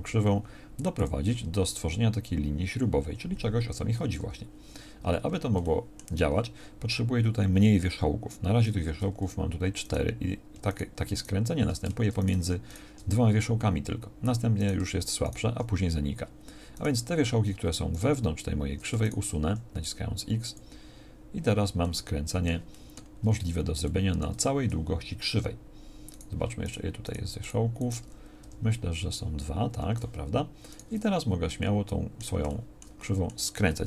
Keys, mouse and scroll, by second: 4.2 Tab, 8.9 Tab, 19.5 x, 28.4 g.